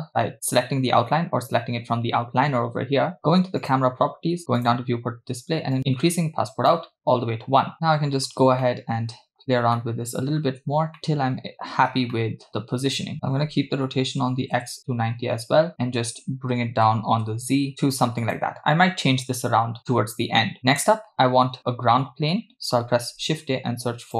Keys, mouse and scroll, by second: 3.6 click, 4.6 click, 4.9-5.2 scroll down 2, 5.8-6.8 drag, 7.7 middle click, 8.6 shift+middle click, 9.8 shift+middle click, 11.0 middle click, 12.2 shift+middle click, 13.1-14.6 shift+drag, 17.0 g, 23.1 shift+a.